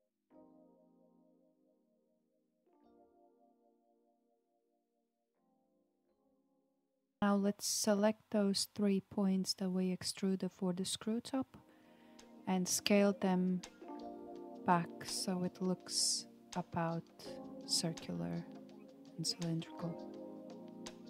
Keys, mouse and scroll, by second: 1.0-3.1 middle drag, 3.1 KP_1, 6.0-9.0 middle drag, 9.2-9.6 scroll down 4, 9.6-11.1 middle drag, 11.1-11.8 scroll up 3, 11.8-13.7 middle drag, 13.7-15.1 drag, 16.0 shift+click, 17.0 shift+click, 18.3 KP_7, 20.9 s.